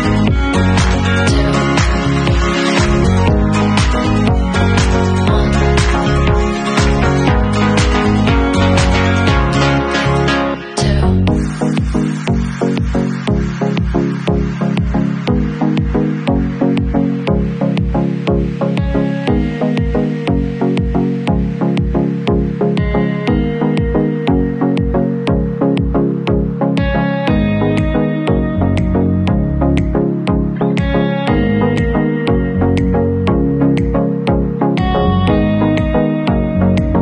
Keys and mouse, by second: 2.1-3.9 middle drag, 3.9-6.2 drag, 6.2 alt+middle click, 6.6-18.4 alt+drag, 7.8 ctrl+z, 12.7 ctrl+z, 12.8 ctrl+z, 17.7 Tab, 18.4 alt+middle click, 18.4-19.9 alt+drag, 19.9 middle click, 20.3-22.3 alt+drag, 21.0 ctrl+s, 22.3-23.3 middle drag, 23.5 shift+q, 31.5 Tab, 31.7-33.0 middle drag, 33.2 ctrl+s, 34.2-35.4 middle drag, 35.4 click, 36.0 alt+middle click, 36.1-37.0 alt+drag.